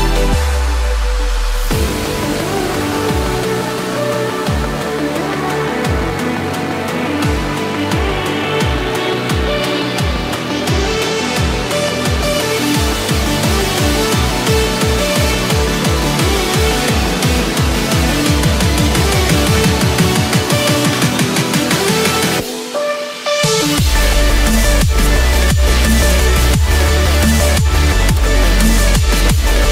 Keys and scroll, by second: 4.7 ctrl+z, 11.8 ctrl+z, 22.6 ctrl+-, 23.7 ctrl+=.